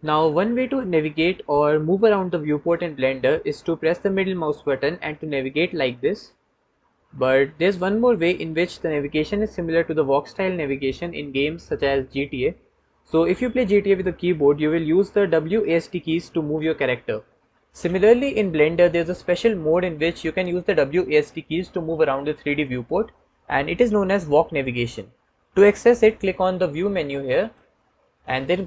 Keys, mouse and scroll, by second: 4.5-5.5 drag, 5.5-7.9 middle drag, 27.2-28.6 drag.